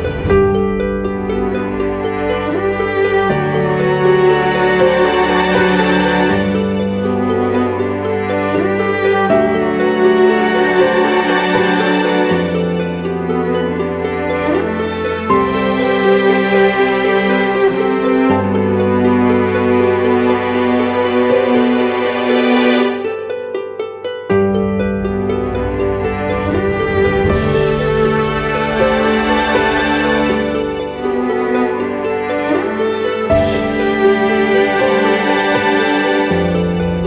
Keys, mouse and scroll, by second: 6.9 ctrl+t, 7.9 alt+shift+click, 12.0 Return, 15.7-18.1 scroll up 1.